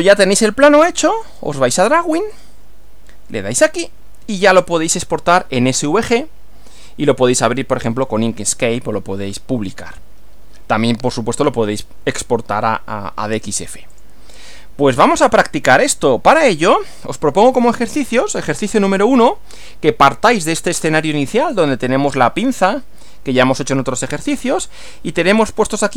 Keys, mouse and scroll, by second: 1.3 click, 2.3 click, 3.6 click, 13.9 click, 16.4 click.